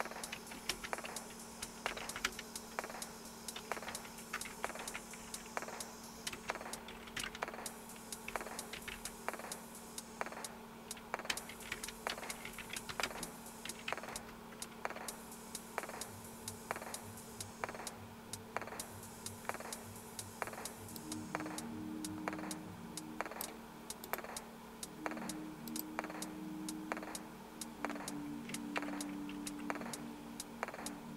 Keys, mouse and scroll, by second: 0.0-2.5 typing, 3.6-9.4 typing, 11.2-16.1 typing, 21.0-23.5 drag, 24.1 right click, 25.7 click, 29.3 super+Left.